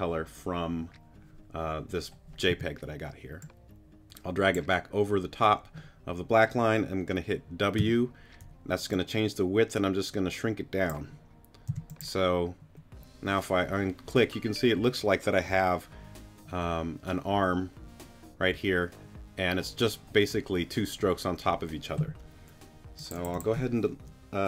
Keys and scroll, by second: 2.5 t, 7.8 w, 11.7 t.